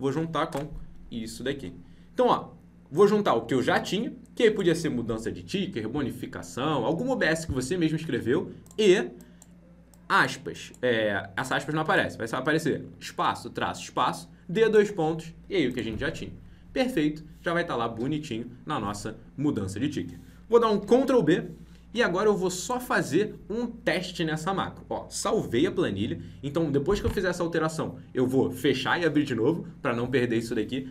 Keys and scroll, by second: 20.7 ctrl+b, 21.8 alt+Tab, 25.4 ctrl+b.